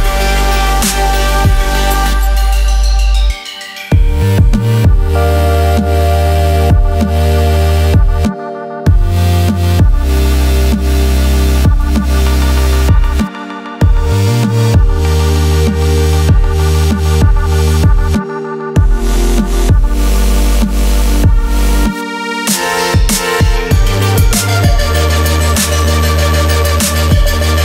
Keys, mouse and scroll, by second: 2.3 alt+scroll up 1, 2.8 alt+click, 3.0 scroll down 1, 3.4 alt+click, 3.7 click, 4.3 scroll down 1, 5.3 click, 6.0 click, 8.1 click, 14.1 click, 16.0 scroll up 1, 16.5 click, 16.9 alt+scroll down 1, 18.0 click, 19.3 alt+scroll up 1, 20.1 click, 20.4 scroll down 1, 20.7-21.0 scroll up 2, 21.5 click, 22.3 scroll down 1, 22.7 click, 22.9 click, 24.4 click, 27.1 click.